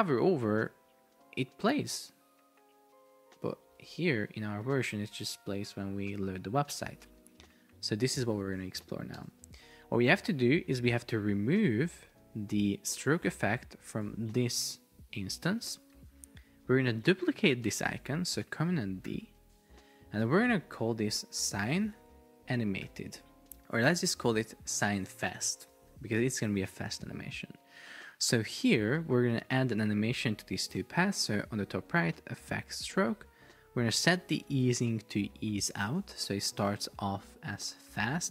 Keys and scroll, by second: 0.0 space, 0.4 Left, 0.8 space, 3.4 space, 3.8 super+Tab, 4.8 super+r, 7.1 Escape, 9.2 Return, 19.1 super+d, 20.4 super+r, 20.8 Up, 21.1 Right, 21.5 space, 21.9 shift+8, 22.5 shift+a, 23.9 shift+f, 24.8 shift+9, 25.3 Return.